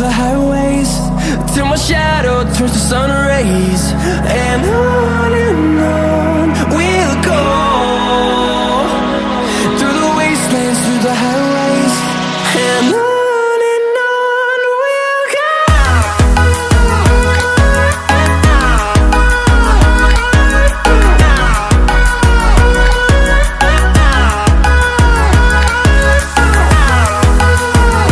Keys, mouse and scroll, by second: 1.0 click, 3.6 click, 5.0 click, 6.4 middle drag, 7.7 click, 8.7 click, 11.9 click, 12.9-14.7 typing, 16.0 KP_5, 17.7 click, 22.2-22.8 scroll up 4, 23.1-23.8 scroll up 4, 24.0 scroll down 2, 24.4-25.0 scroll up 4, 25.2 scroll down 1, 25.9-26.6 scroll down 2, 26.8 scroll up 1, 27.2-27.8 scroll down 3.